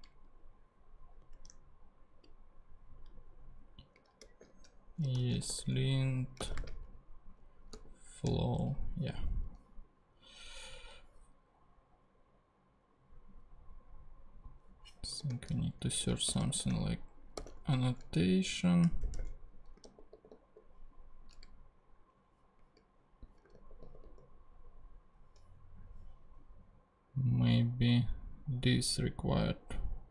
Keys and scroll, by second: 1.3 super+Tab, 4.2 super+t, 4.9-6.6 typing, 7.7 f, 8.6 Return, 15.2 super+f, 16.0 super+a, 16.3-19.6 typing, 19.7 super+a, 19.8 super+g, 23.5 super+g.